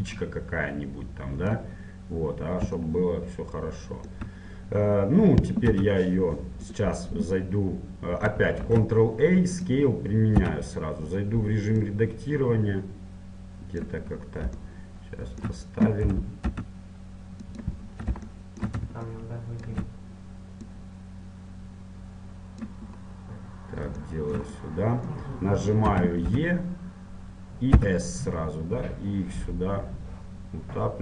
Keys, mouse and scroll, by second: 0.3-2.1 drag, 2.1 middle click, 3.3-5.9 middle drag, 5.9 s, 9.7 ctrl+a, 10.5 Tab, 11.9-13.9 drag, 14.3-16.7 middle drag, 16.3 g, 18.0-19.9 middle drag, 19.9-22.7 drag, 23.1-26.7 middle drag, 26.1 z, 26.5 e.